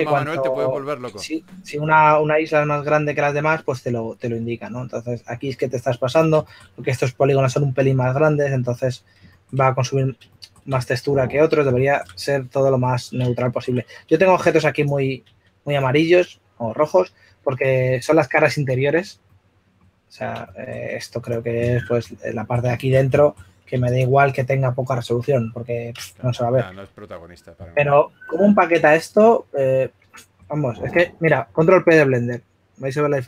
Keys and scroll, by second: 0.1 typing, 3.4 s, 15.7-16.5 typing, 24.4-26.9 typing, 29.2-30.0 typing.